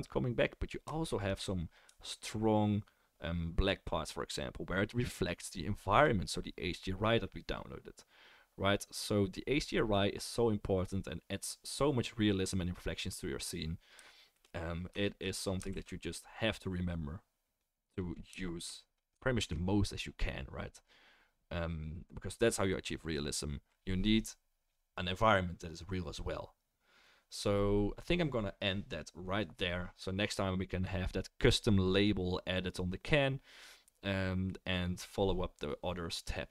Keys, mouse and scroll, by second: 13.4 right click, 13.5-19.0 middle drag, 15.7 ctrl+s, 17.0-19.0 right drag, 17.5-19.0 drag, 19.4 ctrl+s.